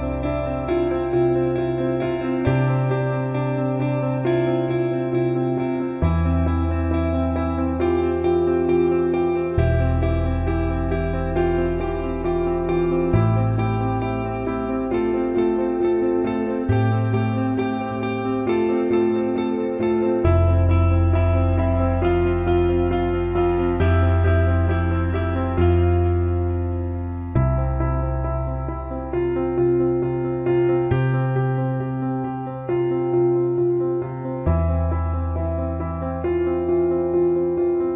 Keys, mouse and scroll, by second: 0.4-3.6 shift+drag, 3.9 alt+middle click, 4.6 alt+shift+middle click, 5.5-5.9 drag, 6.4 drag, 6.9-7.2 alt+middle drag, 7.7-8.9 alt+middle drag, 9.4-9.8 alt+shift+middle drag, 10.5 click, 15.5-16.0 alt+shift+middle drag, 16.6 click, 17.3 Tab, 18.5 click, 19.5-21.3 drag, 22.6-24.7 drag, 25.5 ctrl+s, 26.9 click, 27.2 Tab, 30.4 alt+shift+middle click, 30.9 click, 32.5 click, 34.0 shift+d, 35.5 click, 36.7 s.